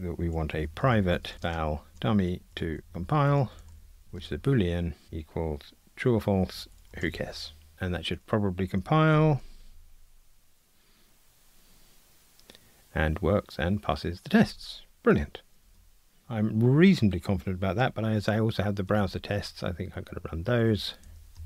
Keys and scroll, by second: 5.0 Return, 7.7 Escape, 9.1 ctrl+r, 18.9 ctrl+alt+r.